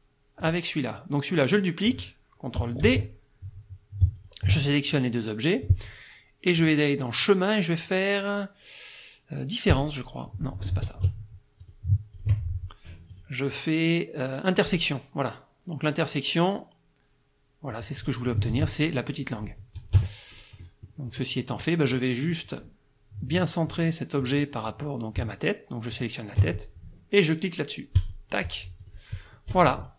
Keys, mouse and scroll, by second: 0.4 click, 2.9 ctrl+d, 4.2 shift+click, 6.6 click, 9.7 click, 10.7 ctrl+z, 11.6 click, 12.1 shift+click, 13.1 click, 14.7 click, 17.7 click, 18.5 ctrl+z, 19.4 click, 20.0 KP_Subtract, 20.7 middle click, 21.6 click, 25.9 shift+click, 28.0 click, 28.8 click, 29.5 KP_Subtract.